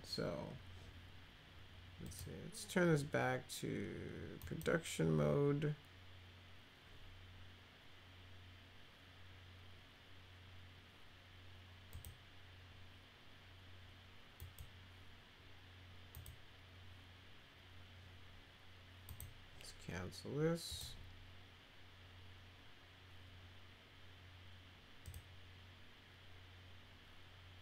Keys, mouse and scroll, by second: 2.1 click, 4.4 click, 11.9 click, 14.4 click, 16.1 click, 19.1 click, 20.7 click, 25.0 click.